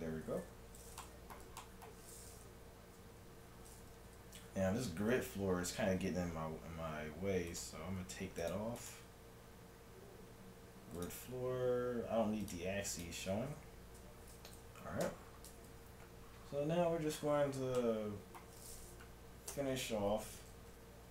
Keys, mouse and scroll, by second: 1.0-3.9 middle drag, 5.6-7.5 middle drag, 7.5-10.6 drag, 11.0-14.8 drag, 13.6 n, 15.1 t, 17.8-19.5 middle drag, 19.5 Tab, 20.7 KP_3.